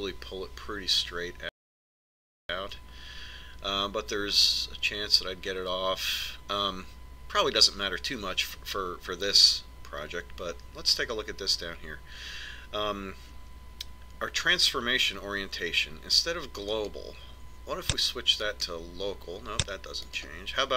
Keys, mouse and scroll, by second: 17.8 click.